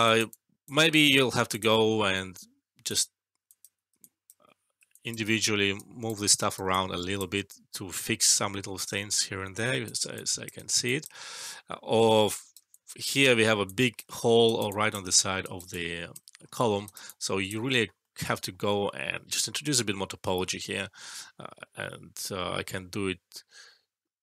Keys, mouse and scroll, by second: 0.0 alt+right click, 0.3-0.8 alt+click, 3.4 ctrl+click, 4.9 alt+click, 5.7 right click, 6.6-7.2 alt+click, 7.9 alt+middle click, 9.0-10.0 right click, 10.0 alt+click, 10.5 alt+right click, 10.8 alt+click, 12.0-12.6 right click, 12.6-13.4 alt+click, 13.2 alt+middle click, 13.6 alt+click, 14.1 alt+middle click, 14.3 alt+right click, 14.6 alt+click, 15.1 alt+middle click, 15.4 alt+right click, 15.6-16.3 alt+click, 16.5 alt+middle click, 16.8 alt+right click, 17.0-17.6 alt+click, 18.0 alt+middle click.